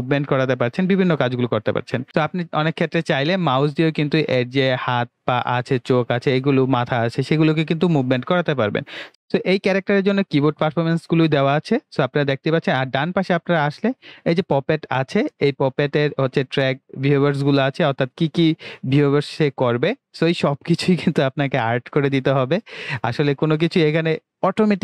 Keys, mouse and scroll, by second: 2.0 click, 23.2 click.